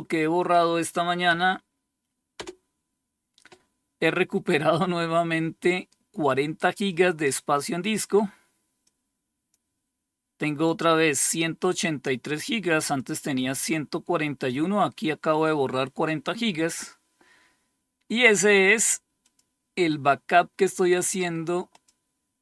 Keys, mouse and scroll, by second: 0.9 Up, 1.8 Return, 6.1-7.9 drag, 8.3 click, 10.1-11.1 drag, 12.4-13.9 drag, 18.7 click, 21.2 click.